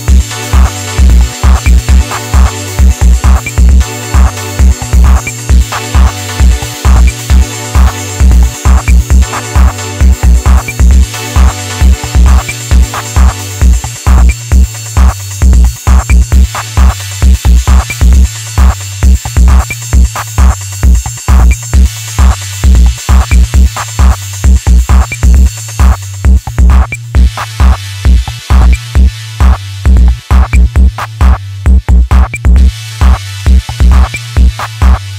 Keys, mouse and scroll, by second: 0.1-1.1 middle drag, 1.1 KP_1, 1.7-2.2 shift+middle drag, 2.2 scroll down 1, 2.5-5.5 middle drag, 5.6-5.9 shift+middle drag, 5.9 scroll up 1, 6.2 Tab, 6.6-7.7 middle drag, 7.7 click, 8.0 middle click, 8.8 ctrl+t, 9.7 ctrl+z, 10.7 ctrl+r, 12.6 click, 13.3 KP_3, 14.0 click, 15.8 middle click, 16.7 KP_1, 17.7 alt+z, 19.1 click, 21.2-22.6 middle drag, 22.6 ctrl+click, 23.7 click, 25.3 KP_3, 25.9 KP_1, 26.8 alt+z, 27.9-28.9 shift+middle drag, 28.9 alt+z, 29.5-30.9 middle drag, 30.9 click, 32.3 shift+click, 33.2 KP_1, 34.0 click.